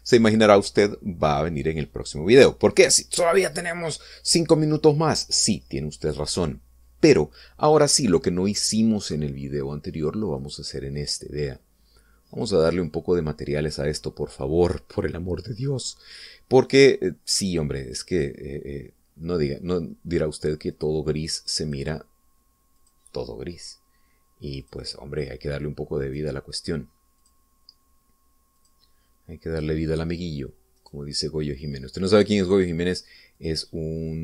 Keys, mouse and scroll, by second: 0.1 click, 11.5 right click, 13.3 click, 14.7 click, 17.9 click, 19.1 click, 21.8 right click, 22.7 click, 23.9 click, 25.7 click, 27.1 right click, 28.3 click, 29.6 click, 30.6 click, 31.8 right click, 33.0 click.